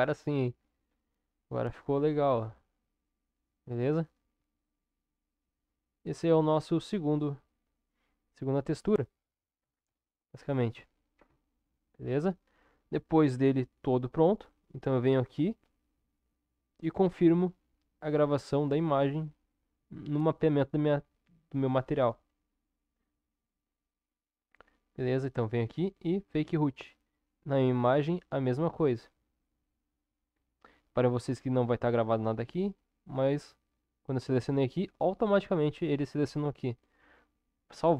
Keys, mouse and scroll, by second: 1.8-6.2 middle drag, 7.2-9.6 middle drag, 9.8 ctrl+KP_7, 11.2 Tab, 30.1 middle click, 33.5-35.1 drag.